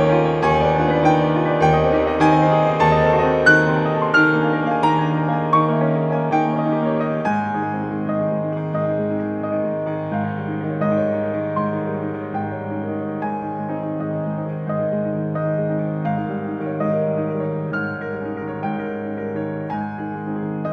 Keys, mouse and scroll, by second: 3.1 click, 4.8 click, 5.4 click, 5.6 scroll up 1, 5.8 scroll down 1, 5.9 scroll up 1, 6.1 1, 6.3 scroll down 2, 6.3 scroll up 2, 7.1 scroll down 2, 7.2-7.8 scroll up 6, 7.8 scroll down 2, 7.8 scroll up 2, 13.6 scroll up 2, 15.2 Escape, 16.1 4, 18.3-18.7 scroll up 2, 19.3 middle click.